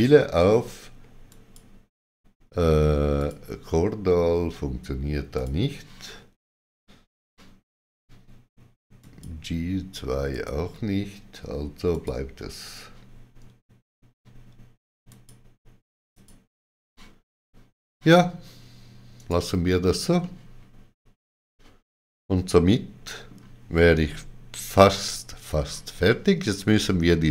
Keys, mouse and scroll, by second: 1.2 shift+click, 3.1 shift+click, 5.3 click, 8.9 click, 8.9 click, 13.9 click, 15.0 click, 19.1 right click, 19.1 click, 20.1 middle click.